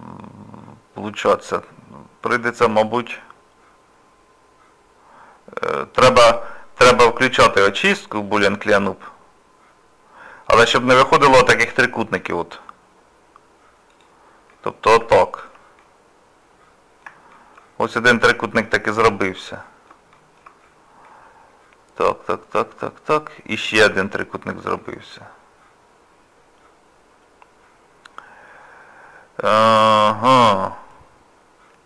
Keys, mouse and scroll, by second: 14.5 middle click, 15.2 shift+middle click, 15.8 middle click, 16.8 middle click, 17.3 shift+middle click, 17.9 middle click, 20.1 shift+middle click, 20.6 scroll down 1, 21.1 middle click, 24.8 middle click.